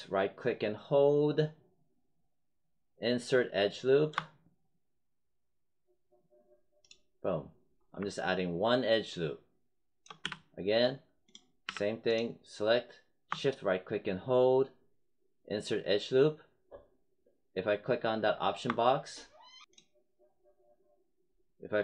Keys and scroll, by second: 10.2 z, 11.6 w.